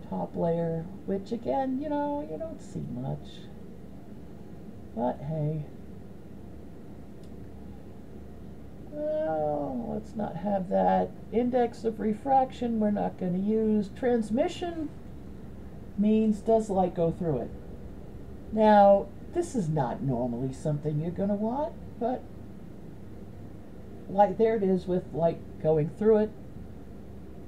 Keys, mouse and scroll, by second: 1.3-2.9 middle drag, 3.6-5.2 middle drag, 8.9-10.1 drag, 20.7-27.1 drag.